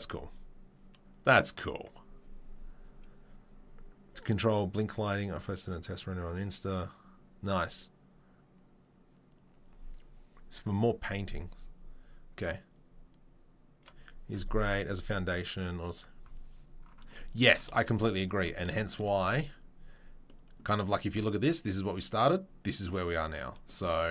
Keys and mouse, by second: 0.0-19.1 middle drag, 19.1 click, 19.2-24.1 middle drag.